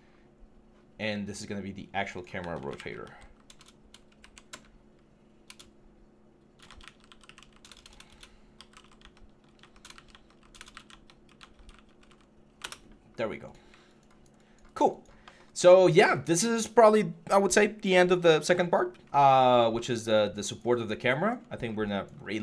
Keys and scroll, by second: 2.3-11.9 typing, 22.1 3.